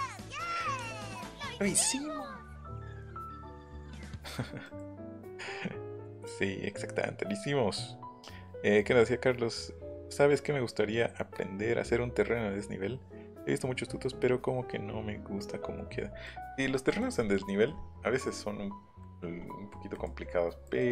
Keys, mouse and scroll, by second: 3.7 middle click, 4.1 middle click, 16.3 middle click, 16.9 middle click, 19.9 middle click, 20.2 scroll down 1, 20.3 scroll up 1, 20.6 middle click.